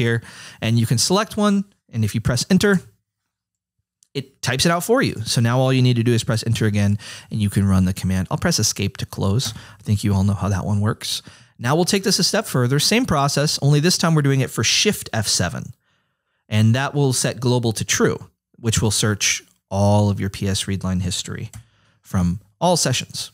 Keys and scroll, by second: 2.8 Return, 6.5 Return, 9.5 Escape.